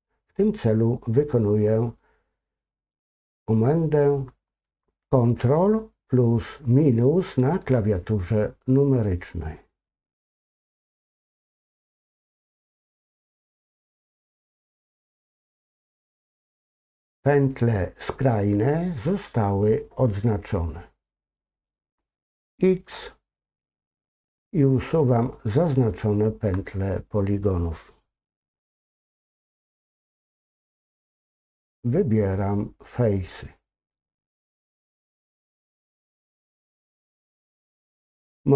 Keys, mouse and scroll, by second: 12.5 ctrl+KP_Subtract, 14.2-15.4 scroll up 2, 15.4-16.1 scroll up 1, 16.1-19.3 scroll up 1, 34.8-35.2 scroll down 2, 35.2-36.3 middle drag, 36.7-38.5 scroll up 2.